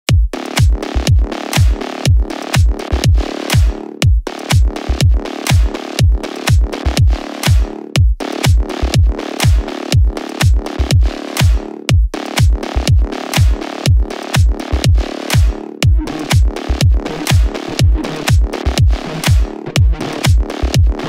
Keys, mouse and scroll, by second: 0.5-1.6 ctrl+drag, 4.5 click, 5.9-7.1 ctrl+drag, 8.7 click, 10.1 click, 10.7-11.8 drag, 13.0 shift+click, 15.2 click, 18.0 click.